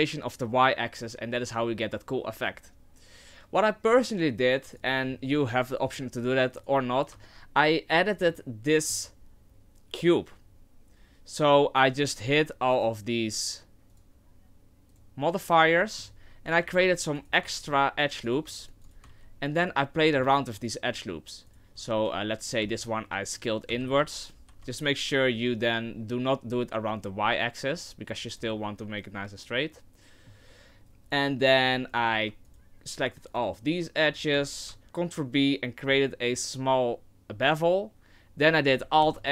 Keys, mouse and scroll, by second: 6.6 right click, 7.1 Tab, 7.9-8.6 scroll up 4, 8.6 middle click, 9.0 scroll down 1, 11.0-11.3 scroll down 2, 12.0 click, 12.7 click, 13.9 click, 14.9 click, 15.8 middle click, 16.6 ctrl+r, 17.5 ctrl+r, 18.5 ctrl+r, 19.1 ctrl+r, 20.3 alt+shift+right click, 20.9 alt+shift+right click, 21.5 alt+shift+right click, 22.6 s, 23.7 s, 28.5 middle click, 30.6-31.5 scroll up 1, 31.9 alt+right click, 32.4 alt+shift+right click, 33.3 alt+right click, 34.1 alt+right click, 39.0 alt+s.